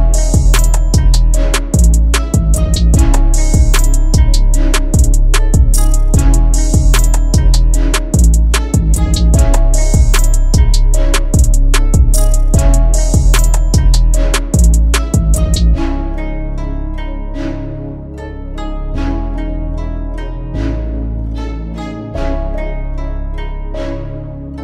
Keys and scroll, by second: 0.7 c, 1.0 shift+F2, 1.5 Escape, 5.7 F4, 8.4 shift+F2, 8.8 shift+Page_Up, 11.1 c, 11.5 shift+F2, 12.0 Escape, 18.7 F2, 22.4 shift+F2, 23.2 Escape.